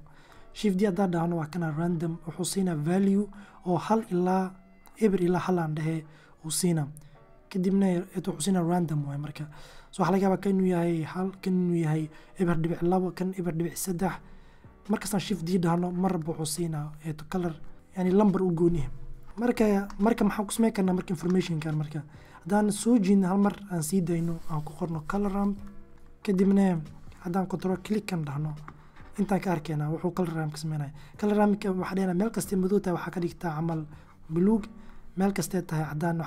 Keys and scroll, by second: 8.5 shift+d, 13.1 d, 14.1 shift+d, 15.0 shift+d, 16.7 shift+d, 23.8-24.8 typing, 25.4 Return.